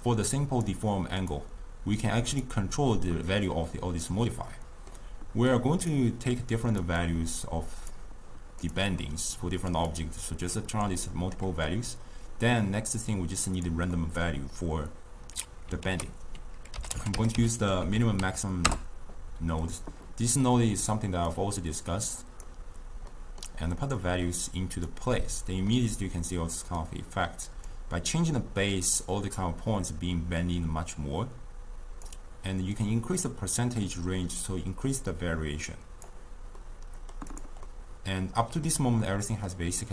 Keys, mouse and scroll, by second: 2.8 click, 3.7-5.5 middle drag, 5.5 click, 6.8 click, 7.1-8.8 drag, 9.7 click, 11.0-13.2 middle drag, 13.2 click, 14.0-15.9 middle drag, 15.9 ctrl+a, 20.2-21.3 middle drag, 21.3 click, 23.2-24.0 middle drag, 24.0 click, 25.8-27.8 middle drag, 27.8-30.8 drag, 32.8-35.8 drag, 36.7-37.4 middle drag, 37.4 drag, 37.8-39.9 middle drag.